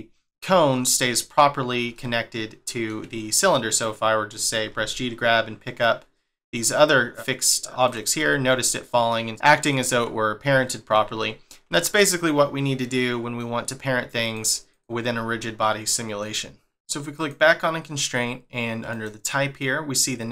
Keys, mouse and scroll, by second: 0.6 scroll down 1, 1.2 scroll up 1, 1.9 shift+middle click, 3.7 click, 4.7 g, 8.2 scroll down 1, 8.7 middle click, 9.3 click, 9.6 click, 10.1-10.5 scroll up 3, 10.9 shift+middle click, 14.2 click, 14.7 click, 15.3 scroll down 1, 15.6 scroll up 1, 17.2 click, 18.9 click.